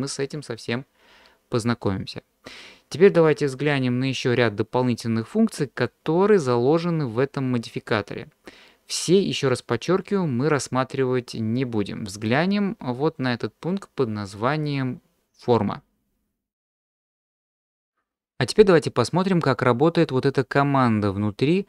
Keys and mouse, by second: 12.2 drag.